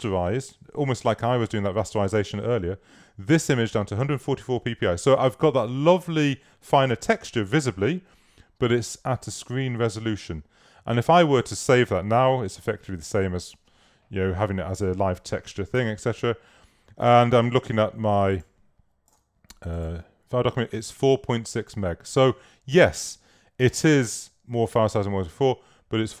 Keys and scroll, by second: 15.9 super+s.